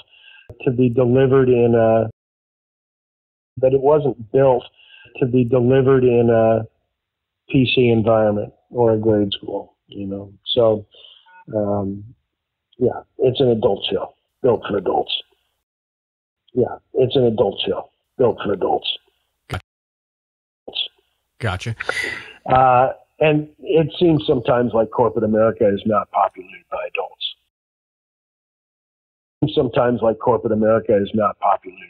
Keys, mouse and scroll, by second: 1.1 click, 2.0 space, 2.2 click, 3.4 click, 3.4 space, 5.8 ctrl+s, 8.6 click, 12.1-15.6 drag, 15.5 space, 16.0 ctrl+shift+Delete, 16.2 space, 17.3 click, 18.0-19.2 drag, 19.8 click, 20.5 click, 20.6 space, 21.8 click, 23.4 click, 25.2-26.8 drag, 27.4 click, 28.8 Delete, 29.2 click, 29.3 space, 29.8 click, 30.2 click, 30.8 click, 31.3 click.